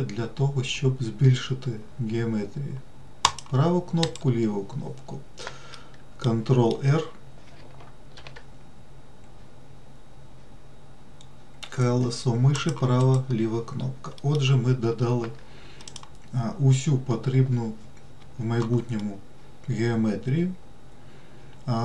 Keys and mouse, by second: 6.1 middle click, 8.5 ctrl+r, 14.5 middle click, 16.2 click, 19.4-21.8 middle drag.